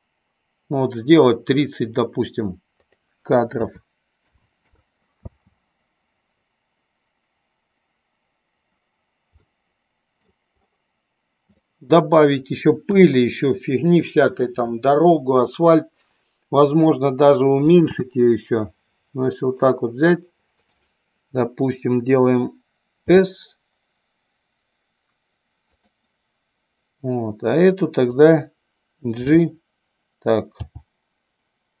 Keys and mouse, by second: 3.0-5.0 drag, 5.3 space, 9.5-10.3 middle drag, 11.6-12.3 middle drag, 13.0 KP_3, 18.1 space, 19.7 drag, 20.6 click, 23.1 s, 28.2 click, 29.2 f, 30.6 g.